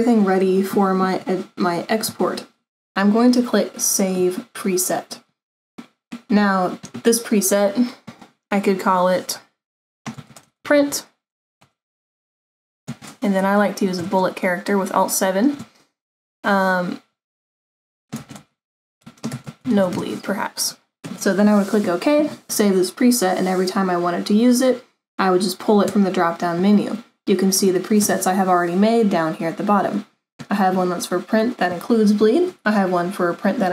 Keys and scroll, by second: 10.0-20.0 typing.